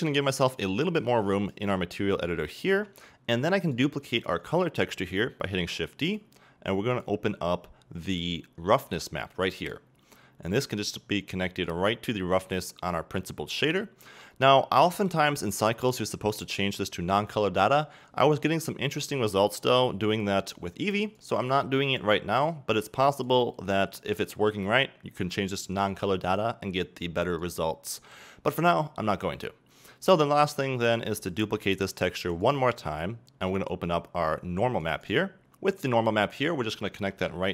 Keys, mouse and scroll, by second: 0.1-2.5 drag, 1.9-2.5 scroll up 2, 2.5-3.7 shift+middle drag, 3.7-7.1 drag, 5.3 shift+d, 9.6 click, 11.7-14.9 drag, 14.9-21.2 middle drag, 21.2 click, 27.4-31.4 drag, 31.4-33.6 middle drag, 31.4 shift+d, 35.1-35.5 drag, 35.9-37.5 drag.